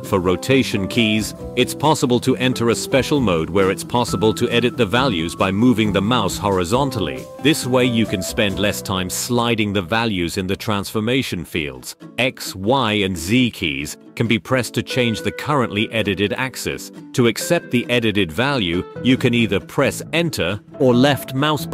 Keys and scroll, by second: 0.6 Escape, 2.3 r, 9.8 r, 10.2 y, 11.4 y, 12.0 y, 13.1 z, 14.9 x, 16.2 y, 17.7 x, 20.1 s.